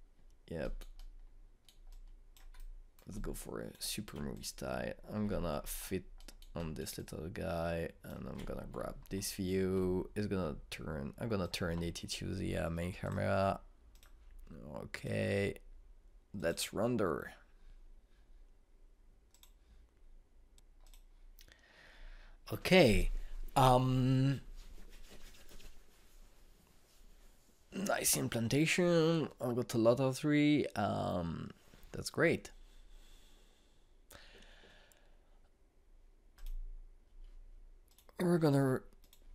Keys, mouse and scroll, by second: 1.9 alt+right click, 2.8 alt+click, 3.5 alt+middle click, 4.0 alt+click, 6.2 f, 7.1 alt+right click, 7.9-11.5 alt+drag, 12.3 click, 20.2 click, 21.5 typing, 37.0 click.